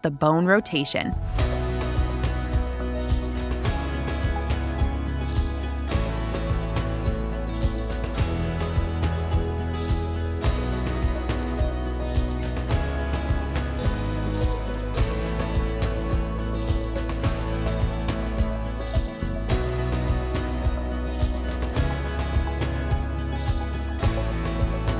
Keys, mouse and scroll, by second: 0.6 click, 0.6 typing, 3.7 click, 9.4 click, 16.2 click, 18.9 click, 20.0 click, 22.1 click, 23.4 scroll down 2, 24.1-24.9 scroll down 1.